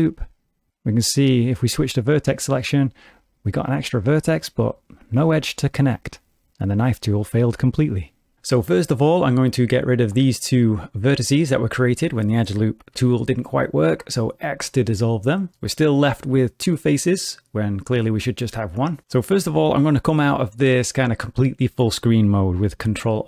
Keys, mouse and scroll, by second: 0.7 1, 2.5 click, 2.9 g, 9.5 click, 12.9 x, 22.5 middle click.